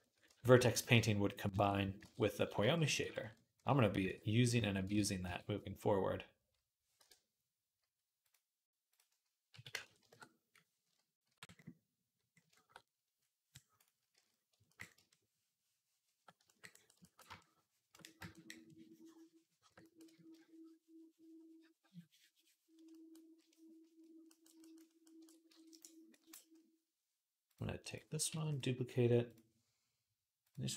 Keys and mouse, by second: 0.0-1.8 ctrl+middle drag, 0.5 shift+click, 1.4 ctrl+j, 1.8 ctrl+Tab, 3.9 ctrl+r, 4.1 click, 4.2-8.0 shift+middle drag, 4.8 ctrl+z, 5.0 r, 8.0-12.7 drag, 9.6 KP_0, 11.6 ctrl+r, 12.7-13.9 right drag, 13.9-19.7 drag, 13.9 d, 19.8-25.6 shift+drag, 25.3 ctrl+Tab, 28.1 shift+d.